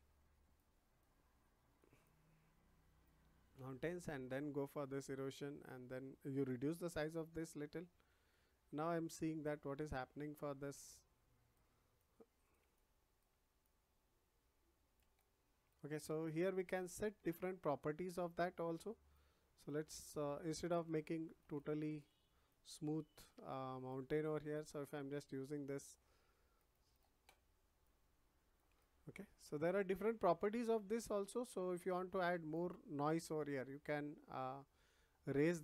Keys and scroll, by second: 6.9 [.